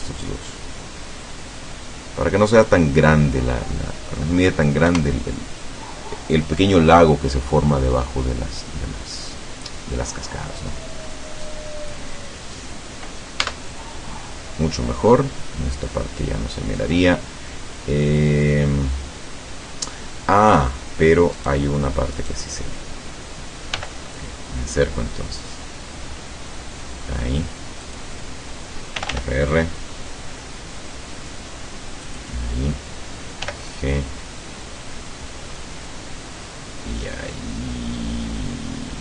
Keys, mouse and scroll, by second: 0.1-4.3 drag, 4.9 KP_0, 13.4 Tab, 21.4 right click, 22.2 right click, 23.8 g, 24.0 middle click, 27.8 click, 29.0 r, 32.2 click, 33.5 g.